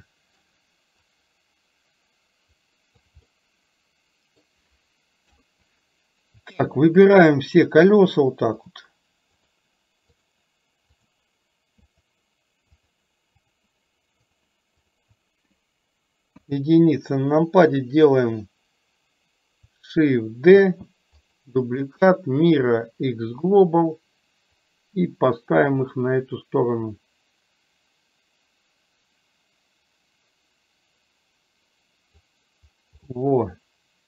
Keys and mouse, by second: 1.2-3.2 drag, 3.4-4.5 middle drag, 5.4 KP_3, 6.7 shift+click, 8.8 shift+click, 9.4 shift+click, 10.3 shift+click, 11.0 shift+click, 12.8 shift+click, 13.5 shift+click, 16.4 KP_1, 20.7 shift+d, 24.6-32.3 drag, 33.2-34.0 middle drag.